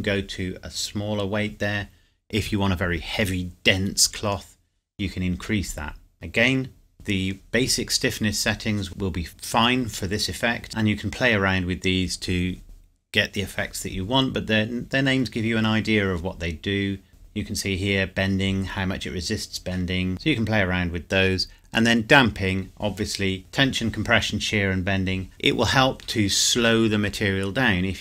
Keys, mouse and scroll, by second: 20.1-20.8 scroll down 1, 21.8-23.4 scroll down 1.